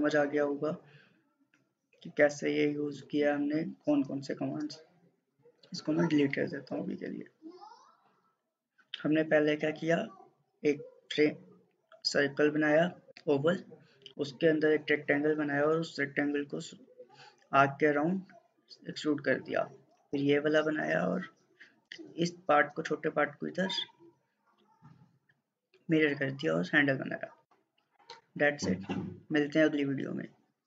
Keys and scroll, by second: 5.6 Delete.